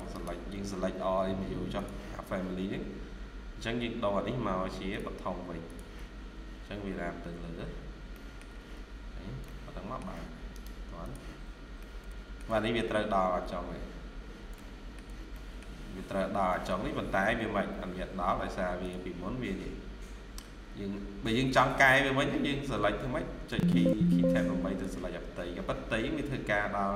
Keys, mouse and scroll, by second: 0.0 right click, 7.6 scroll down 1, 8.0 middle click, 8.4 Escape, 8.6 Escape, 8.8 scroll down 1, 9.4 shift+middle click, 10.4 right click, 11.3 scroll up 1, 11.7 middle click, 12.6 scroll up 1, 12.6 middle click, 14.0-14.7 scroll down 2, 15.2 middle click, 16.4 middle click, 16.7 scroll down 1, 16.9 scroll up 1, 19.6 scroll down 1, 20.3 Escape, 21.2 scroll down 1, 23.4 Tab, 23.7 Tab, 24.1 Tab, 26.3 scroll up 1.